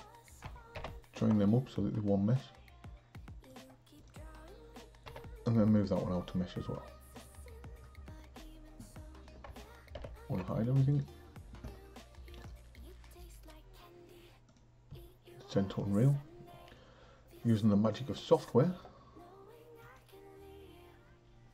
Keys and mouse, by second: 0.9 ctrl+j, 3.7-4.1 drag, 5.0 m, 7.1 click, 10.0 alt+h, 10.9-21.5 drag.